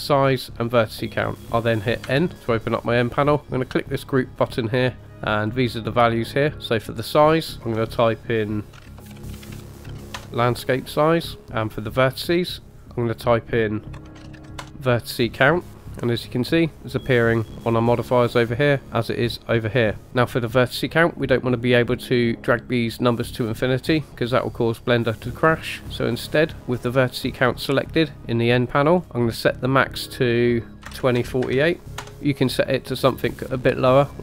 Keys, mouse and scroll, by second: 4.0 click, 5.0 click, 6.9 click, 7.1-10.2 drag, 12.7 click, 12.8-14.6 drag, 29.8-32.0 drag.